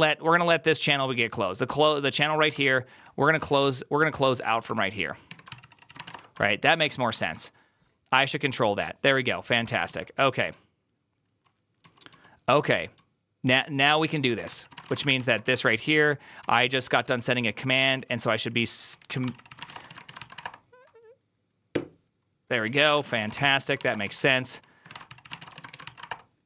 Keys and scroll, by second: 0.0-0.6 typing, 2.1-4.5 typing, 5.2 Tab, 5.3 ctrl+c, 5.4 ctrl+c, 5.6-7.5 typing, 6.6 ctrl+c, 9.4 ctrl+a, 9.6-19.9 typing, 9.7 ctrl+u, 20.1 ctrl+c, 20.2 Up, 20.3 Return, 22.5-26.4 typing, 23.8 Return, 23.9 ctrl+u.